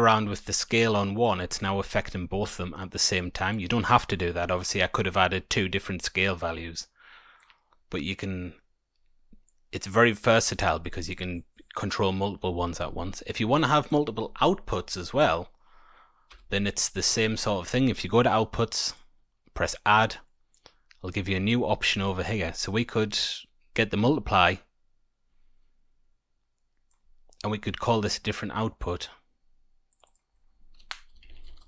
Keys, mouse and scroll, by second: 0.1 click, 3.1 click, 7.3 click, 13.5 click, 14.2 middle click, 14.5-15.7 scroll down 2, 14.9 middle click, 16.2 Tab, 16.9 middle click, 18.8 click, 20.2 middle click, 21.5 click, 23.3 click, 29.8 click, 30.0 click.